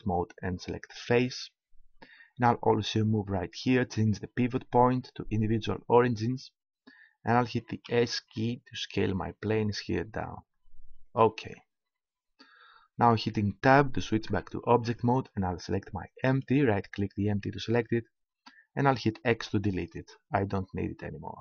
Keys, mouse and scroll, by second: 4.4-6.3 drag, 7.9 s, 11.2-13.0 drag, 14.2 Tab, 16.2-17.8 drag, 17.8 right click, 19.4 x.